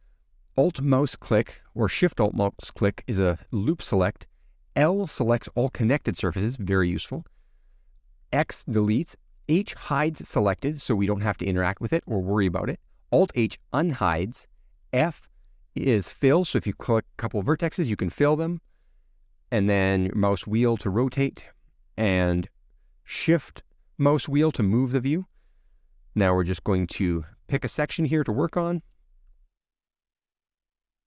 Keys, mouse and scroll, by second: 10.0-10.4 scroll up 3, 10.4 middle click, 10.8-11.2 scroll down 1, 11.2-12.3 middle drag, 12.3-12.8 scroll down 2, 12.8-16.7 middle drag, 16.7-17.3 scroll down 2, 17.4-19.0 middle drag, 19.0-19.5 scroll up 1, 19.5 scroll up 1, 19.5-22.0 middle drag, 22.0 click, 25.0-31.0 shift+middle drag.